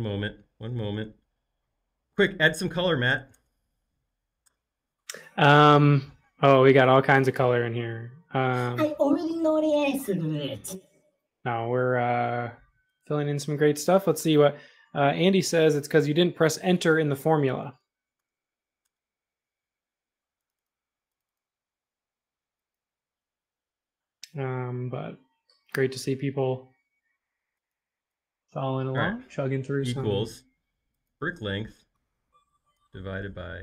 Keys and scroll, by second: 0.7 shift+8, 3.1 BackSpace, 3.3 BackSpace, 4.4 Return, 17.0 Right, 17.6 BackSpace, 17.8 BackSpace, 18.2 BackSpace, 18.8 Return, 29.8 =.